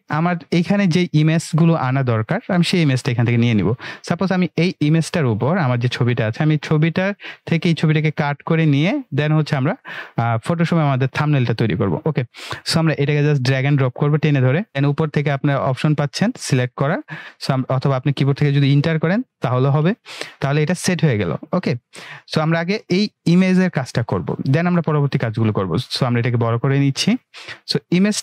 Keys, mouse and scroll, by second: 5.3 click, 10.1-11.0 click, 11.1 drag, 18.8 Return, 20.7 click, 25.7-28.2 drag.